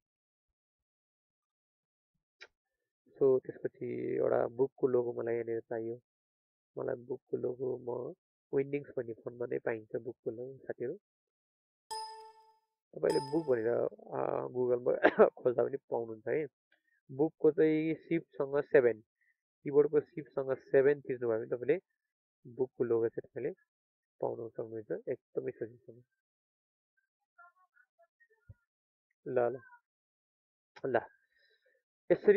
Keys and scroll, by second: 21.0 ctrl+a.